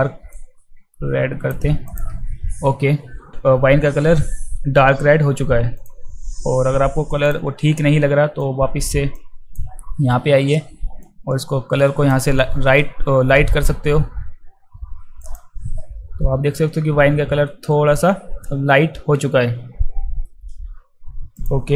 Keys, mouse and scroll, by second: 0.3 click, 1.9 click, 5.8 click, 8.4-8.8 drag, 9.1-9.6 drag, 11.1-12.1 drag, 15.2 click, 21.4 click.